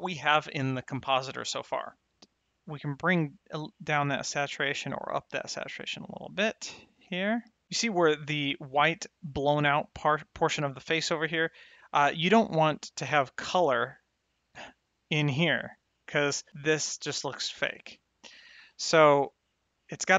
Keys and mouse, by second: 0.4 middle click, 0.6 middle click, 0.8 click, 1.1 click, 1.3 middle click, 1.7 click, 1.9 click, 13.3 click, 18.9 click.